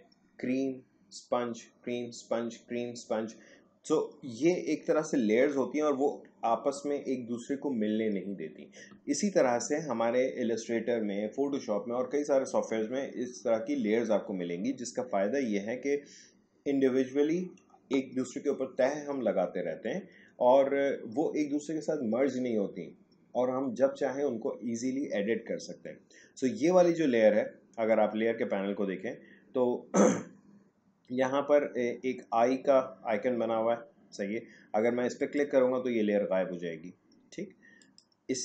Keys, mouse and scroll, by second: 35.1 click, 37.7 click.